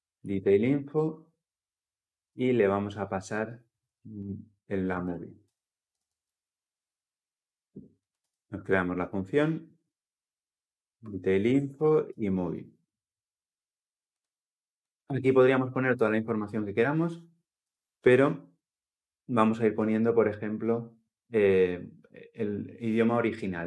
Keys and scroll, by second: 5.2 Return, 5.6 ctrl+alt+l, 5.8 ctrl+alt+o, 10.8 Return.